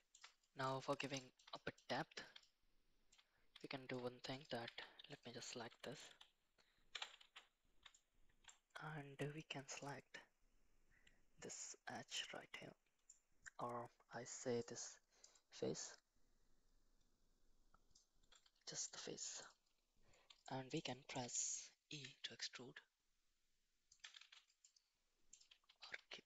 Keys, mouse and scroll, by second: 0.6-0.9 middle drag, 1.1 shift+middle drag, 1.5 middle drag, 1.9 middle drag, 2.4-3.1 shift+middle drag, 3.5-3.9 shift+middle drag, 4.3 click, 4.6 Tab, 5.1 click, 6.0 KP_7, 7.2 shift+z, 7.9 shift+middle click, 9.9-13.0 drag, 14.6 ctrl+click, 15.9-17.9 ctrl+drag, 18.8 middle click, 20.4 shift+middle click, 20.8 shift+middle click, 21.9 e, 24.2 shift+z, 24.6 middle click, 25.6 ctrl+z, 25.9 ctrl+z.